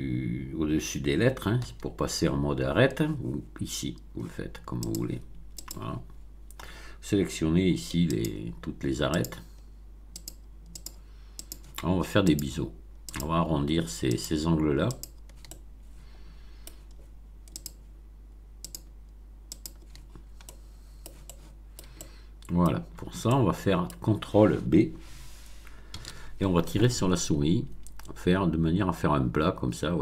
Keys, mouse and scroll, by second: 4.8 click, 5.5 click, 8.1 shift+click, 9.1 shift+click, 10.1 shift+click, 10.7 shift+click, 11.3 shift+click, 12.3 shift+click, 13.1 shift+click, 14.0 shift+click, 14.9 shift+click, 15.4-16.8 shift+middle drag, 17.5 shift+click, 18.6 shift+click, 19.5 shift+click, 20.0-20.4 shift+scroll down 1, 20.4 middle click, 21.4 shift+middle click, 22.0-22.8 shift+middle drag, 22.9 scroll up 1, 23.2-24.0 shift+middle drag, 25.9 ctrl+b.